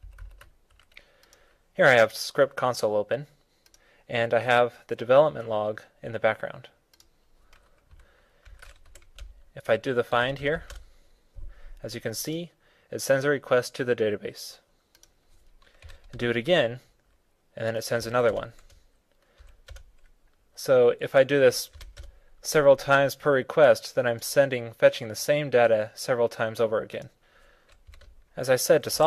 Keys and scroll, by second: 8.3 super+v.